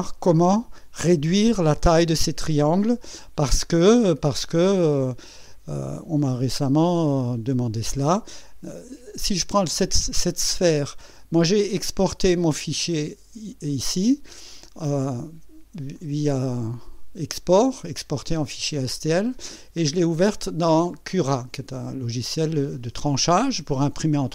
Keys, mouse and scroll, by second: 7.6 click, 12.5 click, 15.9 click, 19.8 click.